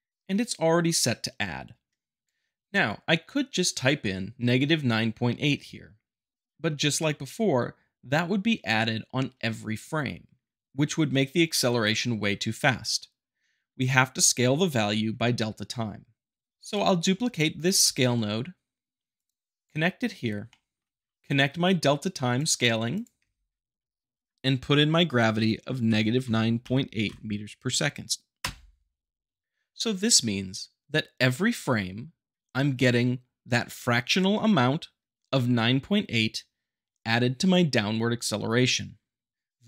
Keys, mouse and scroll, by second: 2.2 click, 16.6 click, 17.7 shift+d, 19.1 click, 20.4 shift+middle click, 21.1 click, 23.1 g, 26.2 9, 26.6 >, 27.0 8, 28.3 Return.